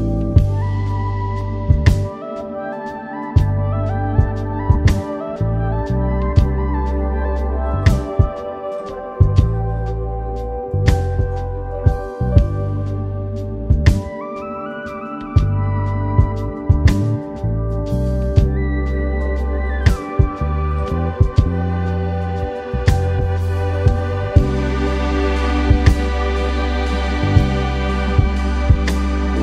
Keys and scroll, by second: 0.4 [, 2.8 super+-, 3.0 super+0, 3.3 super+s, 6.0 super+s, 21.3 super+-, 21.4 super+0, 21.8 super+s.